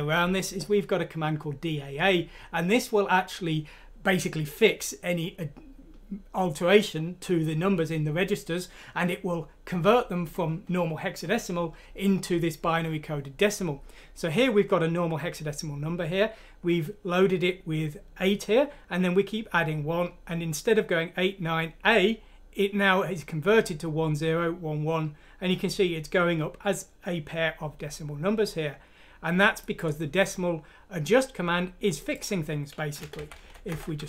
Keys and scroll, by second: 33.0 Home.